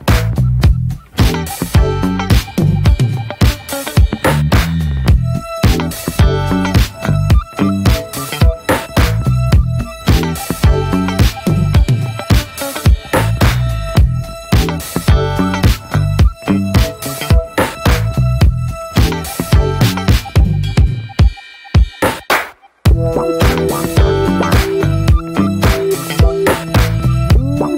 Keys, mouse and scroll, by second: 2.8 scroll down 1, 3.0-4.5 shift+middle drag, 4.5 click, 4.9 middle click, 5.2 Tab, 5.6-7.9 middle drag, 7.9-8.6 scroll up 1, 8.7-10.0 middle drag, 10.0 Tab, 11.4 click, 12.4 click, 12.9-13.3 middle drag, 13.3 click, 13.6 Tab, 14.0 middle click, 14.5 Tab, 15.5-17.5 drag, 20.2-22.4 middle drag, 22.4 Tab, 23.0-24.8 middle drag, 24.8 click, 25.3-26.8 middle drag, 26.8 Tab, 27.1-27.7 middle drag.